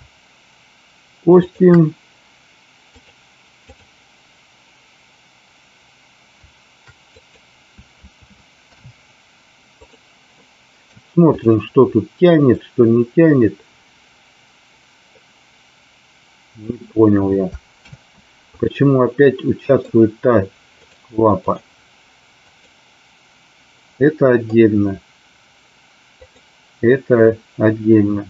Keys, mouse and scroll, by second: 1.3 shift+drag, 2.8-3.8 drag, 7.1 click, 8.6 ctrl+p, 10.3 middle click, 12.4-16.7 drag, 17.9 ctrl+z, 19.2-19.8 middle drag, 20.8 click, 22.5 click, 23.9 middle click.